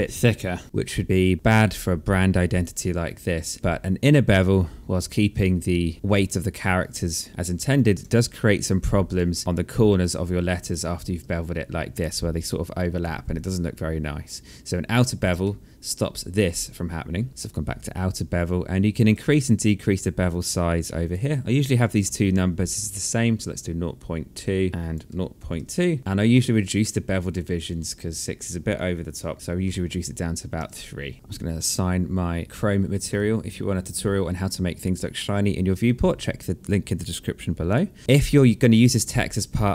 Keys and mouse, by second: 1.2 alt+click, 5.1 click, 7.3 alt+click, 7.6 alt+middle click, 9.5 alt+right click, 12.4 click, 12.8 alt+click, 14.9 alt+middle click, 18.2 alt+click, 19.8 click, 21.0 KP_0, 23.4 KP_2, 24.4 BackSpace, 24.7 KP_2, 25.2 click, 28.9 KP_3, 29.6 KP_Enter, 32.4 alt+click, 37.3 alt+click.